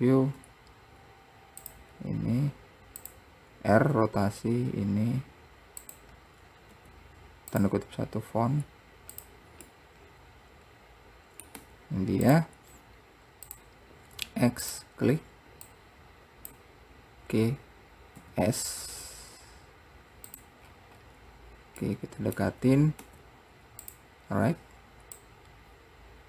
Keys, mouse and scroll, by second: 3.2 click, 4.1 r, 8.6-9.3 scroll down 2, 9.3 click, 9.8-11.7 middle drag, 13.7 click, 14.3 x, 15.8 click, 18.4 s, 20.8-21.1 scroll up 4, 22.0-23.1 middle drag, 24.4-25.4 scroll down 2, 25.4 click.